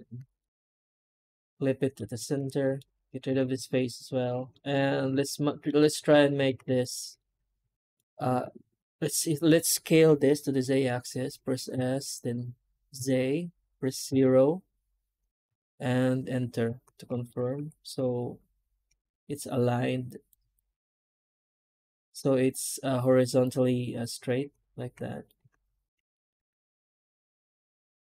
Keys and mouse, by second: 1.2 middle click, 2.0 shift+middle click, 2.5 middle click, 2.7 3, 3.0 click, 3.4 x, 3.6 middle click, 5.1 alt+shift+click, 5.9 2, 6.3 alt+a, 7.0 middle click, 17.1 shift+middle click, 24.0-25.8 drag, 26.0 shift+middle click, 27.4-28.1 middle drag.